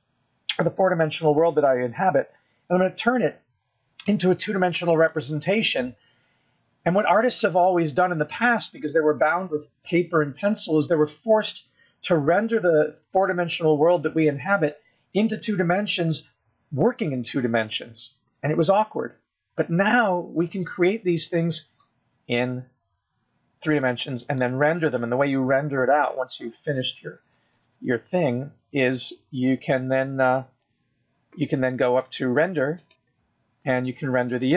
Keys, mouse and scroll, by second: 23.7 scroll down 2, 24.2 scroll up 4, 24.7-25.9 scroll down 1, 25.9-26.8 scroll down 1.